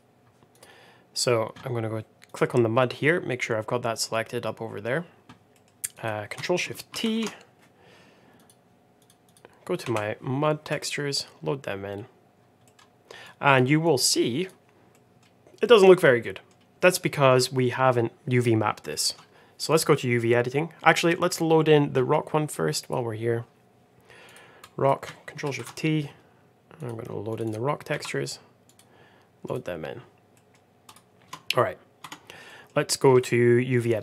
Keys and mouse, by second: 0.4 click, 1.1 click, 2.2 click, 5.5 middle click, 6.9 ctrl+shift+t, 12.5 middle click, 13.3 drag, 13.7 click, 14.9 middle click, 15.5 middle click, 16.1 middle click, 16.9 middle click, 18.8 middle click, 20.9 middle click, 22.7 click, 24.5 click, 25.4 ctrl+shift+t, 30.2 middle click, 30.8 click, 31.2 Tab, 32.5 Tab, 32.5 middle click.